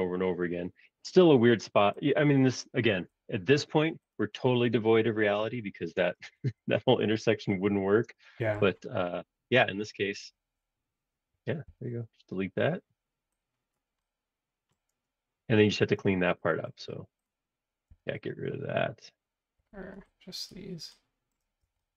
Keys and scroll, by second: 2.9 Escape, 6.3 Escape, 6.5 Escape, 11.6 e, 15.5 Escape, 15.8 space, 16.0 Escape, 17.9 e, 19.6 Escape, 21.4 space, 21.6 Escape.